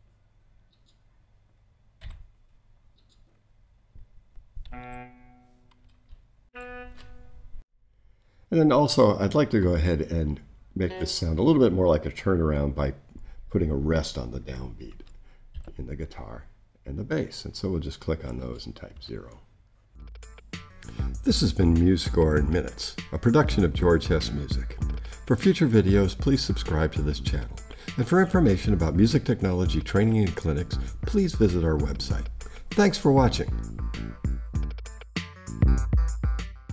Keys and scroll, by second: 1.5 4, 2.0 0, 6.5 shift+super+Up.